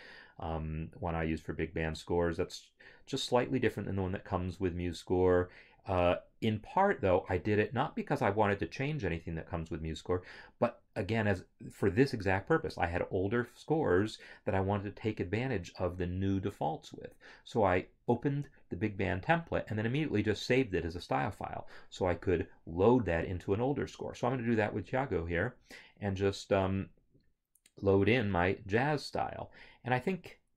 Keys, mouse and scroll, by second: 29.2 click.